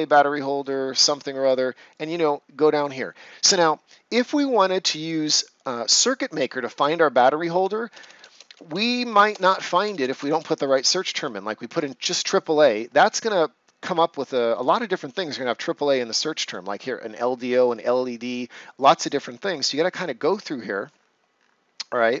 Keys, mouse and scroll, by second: 1.3 click, 7.5 End, 7.8 BackSpace, 11.7 Return, 15.2-19.5 drag, 19.5-20.3 scroll up 1, 20.3 click, 20.8 scroll up 1.